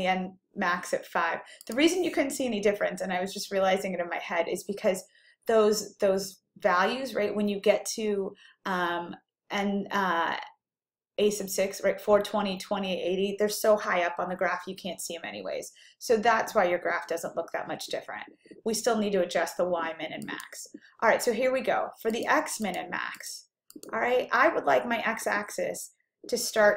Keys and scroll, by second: 18.8 ÷, 20.3-21.0 typing, 22.2 Down, 22.7 Down, 23.8 Down.